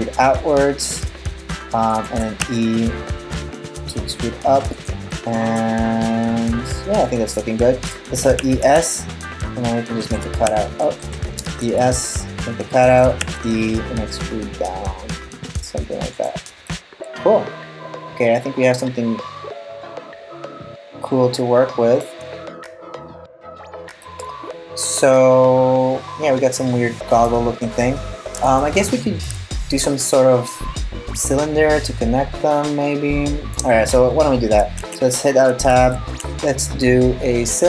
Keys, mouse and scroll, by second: 2.0 e, 4.7 middle click, 8.0 e, 10.1 e, 11.0 e, 12.8 e, 16.3 middle click, 22.1 scroll up 1, 22.3-23.6 scroll down 5, 23.6 middle click, 27.1 scroll down 2, 27.4-28.1 scroll up 2, 28.1 scroll up 2, 28.2 shift+middle click, 29.7 middle click, 34.4 Tab, 35.3 shift+a.